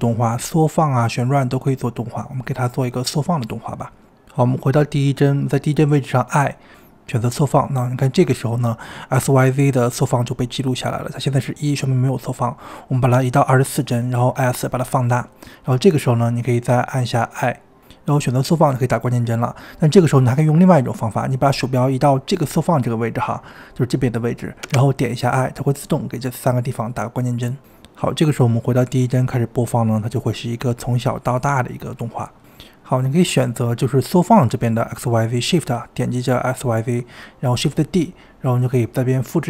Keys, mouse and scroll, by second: 2.3 space, 3.3 space, 3.6-4.1 drag, 4.1 ctrl+z, 4.2-5.5 drag, 11.2-14.1 drag, 14.1 s, 26.0-27.7 scroll down 3, 27.7-29.9 drag, 30.3 click, 31.1 space, 32.2 space, 34.3 click, 36.4 shift+click, 37.1 shift+click, 38.9 shift+d.